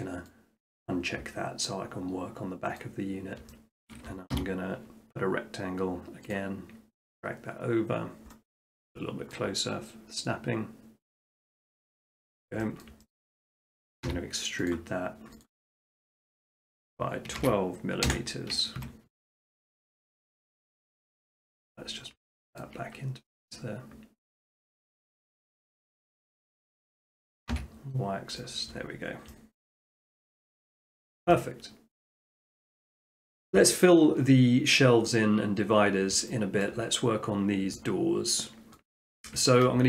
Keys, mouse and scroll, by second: 0.7 click, 2.8 middle click, 3.2 middle click, 3.4 middle click, 3.8 shift+middle click, 3.8 shift+middle click, 4.4 r, 6.4-7.4 drag, 8.7-9.2 middle drag, 9.9 middle click, 9.9 shift+middle click, 11.1 shift+middle click, 11.8 click, 12.1 middle click, 12.2 middle click, 12.3 middle click, 12.9 middle click, 13.3 shift+middle click, 14.1 e, 14.7 click, 15.5 click, 17.3 typing, 18.1 Return, 18.8 Tab, 19.7-20.9 shift+middle drag, 20.9-21.5 drag, 21.5 middle click, 21.8 middle click, 22.0 middle click, 22.6 shift+middle click, 22.7 shift+middle click, 22.9 middle click, 23.0 middle click, 24.7 click, 27.5 y, 28.4 click, 28.8-29.4 scroll down 5, 30.2 middle click, 30.3-30.8 scroll down 1, 31.1 shift+middle click, 32.2 middle click, 36.1 middle click, 36.7 shift+middle click, 37.0 middle click, 37.2 middle click, 37.3 shift+middle click, 37.3 middle click, 37.7 shift+middle click, 38.8 shift+middle click, 39.0 shift+middle click.